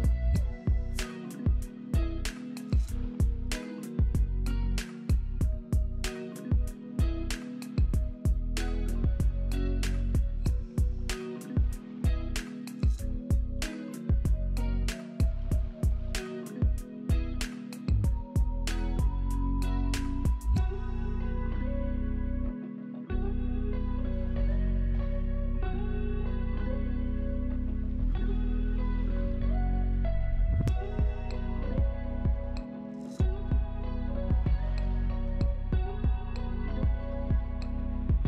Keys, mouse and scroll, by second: 14.9-16.4 scroll down 1, 16.4-16.8 scroll down 1, 20.1 right click.